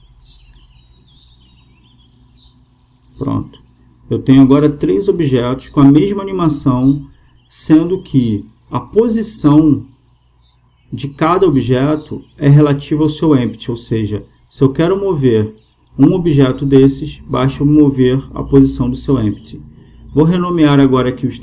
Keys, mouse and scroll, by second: 2.3-4.2 drag, 16.0-17.9 right drag, 20.0-21.4 drag.